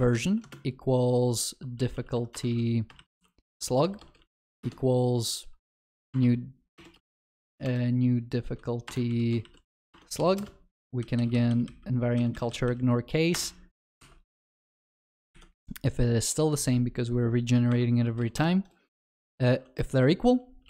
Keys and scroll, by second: 14.5 ctrl+alt+shift+l, 14.9 ctrl+s.